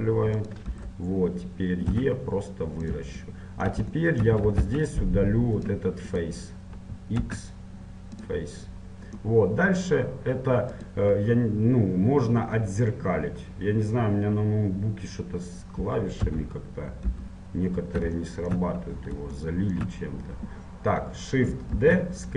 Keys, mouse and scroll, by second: 0.9 KP_1, 2.1 e, 3.4-5.8 middle drag, 5.8 ctrl+Tab, 6.3-8.4 right drag, 8.4 x, 10.9-16.3 right drag, 16.3 l, 17.3 KP_1, 18.4-21.9 middle drag, 21.9 shift+d.